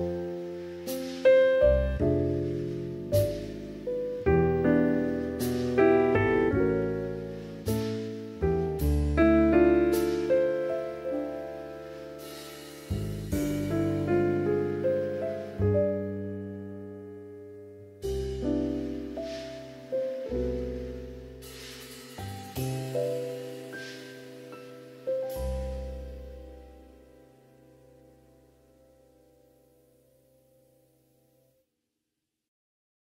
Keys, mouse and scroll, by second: 1.5 click, 2.1-3.1 drag, 3.1 Tab, 3.4-4.3 middle drag, 4.4 alt+z, 4.7-6.1 middle drag, 6.6-8.3 middle drag, 8.7 middle click, 9.2 click, 11.1-11.5 drag, 12.1 Tab, 12.4 Tab, 12.6 right click, 13.1-14.0 middle drag, 15.7-16.3 drag, 16.7-17.1 drag, 17.1-18.7 middle drag, 19.3 ctrl+s, 19.6 middle drag, 20.0 shift+middle click, 20.6-21.2 middle drag, 21.5 middle click, 22.6 KP_1, 23.2 shift+middle click, 23.5 alt+z, 24.1 shift+middle drag, 25.0-29.2 drag, 29.8 shift+middle click, 31.4 s.